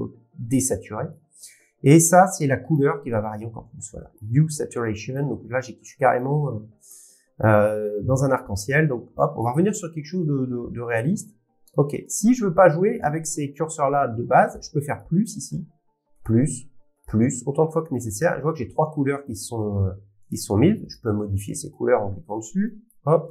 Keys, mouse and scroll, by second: 1.1 click, 2.7 click, 4.1 click, 6.2 click, 6.2-6.5 scroll, 7.4-8.0 scroll, 7.9 shift+middle click, 8.3 middle click, 9.0 scroll, 9.4 click, 12.0 click, 14.9 click, 16.2 click, 19.3 click, 22.9 click.